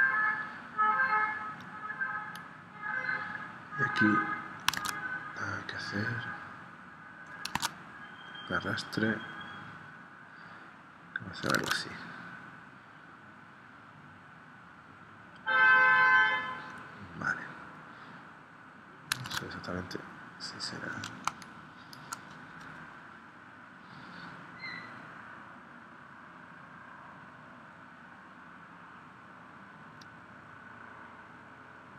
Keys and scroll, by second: 4.8 super+Tab, 7.5 super+Tab, 11.6 super+Tab, 19.2 super+Tab, 21.3 space.